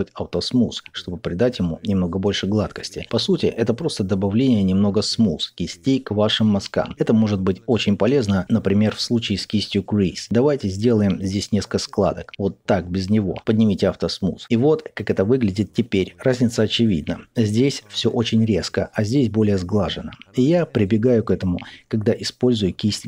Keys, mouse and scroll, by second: 0.7-7.9 middle drag, 7.9 click, 8.4 middle click, 9.0-19.8 drag, 19.8-22.0 middle drag, 22.0-23.0 ctrl+drag.